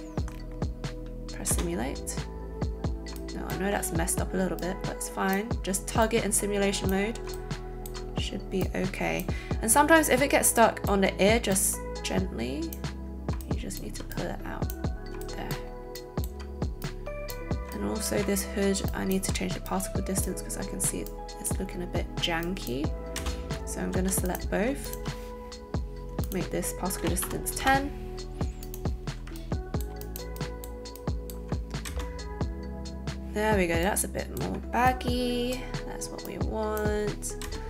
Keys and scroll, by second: 1.6 space, 23.2 space, 23.9 a, 24.6 shift+a, 27.0 KP_1, 27.2 KP_0, 27.6 Return, 31.8 alt+space, 37.4 space.